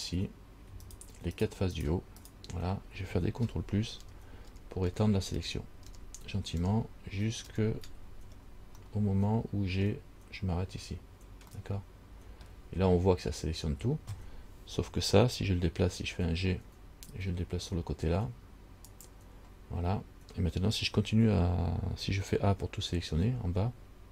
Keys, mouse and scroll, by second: 0.0 click, 1.0 shift+right click, 1.6 shift+right click, 2.0 shift+right click, 2.4 shift+right click, 4.2 ctrl+KP_Add, 4.7 ctrl+KP_Add, 5.1 ctrl+KP_Add, 5.6 ctrl+KP_Add, 6.1 ctrl+KP_Add, 6.8 ctrl+KP_Add, 7.7 ctrl+KP_Add, 9.0 middle click, 11.8 middle click, 16.8 g.